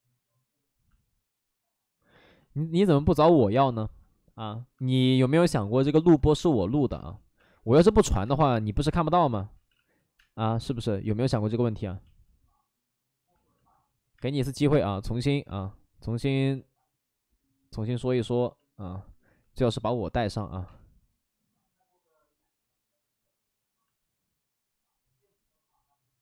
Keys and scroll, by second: 6.2-8.3 typing, 9.5 ctrl+z, 9.7 ctrl+z, 10.1 space, 10.6 space, 10.8 space, 15.4 ctrl+z, 18.2 space, 20.7 space.